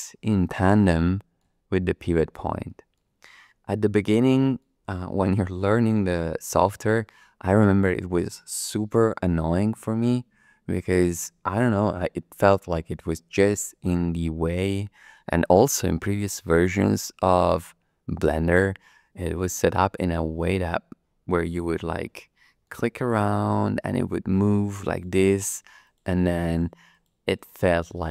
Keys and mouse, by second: 1.7 shift+middle click, 2.6 shift+click, 3.3 click, 4.0 middle click, 5.1-6.5 shift+middle drag, 13.0-15.1 middle drag, 15.5-16.6 shift+middle drag, 21.4 click, 22.4 middle click, 23.3 shift+middle click, 23.8 shift+click, 24.3 shift+click, 24.9 shift+click, 25.3 shift+click, 25.8 shift+click, 26.5 shift+click, 26.9 shift+click, 27.3 shift+click, 27.9 shift+click.